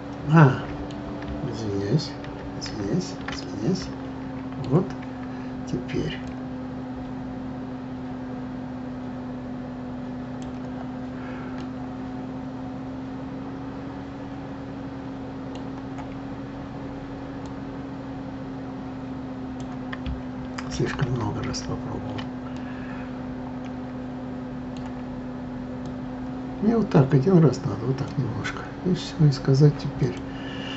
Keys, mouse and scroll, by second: 2.2 ctrl+z, 2.6 ctrl+z, 3.4-6.3 middle drag, 6.3 click, 11.6-14.6 middle drag, 17.4 click, 20.7 ctrl+z, 21.1 ctrl+z, 22.5-25.6 middle drag, 25.8 click, 30.0-30.7 drag.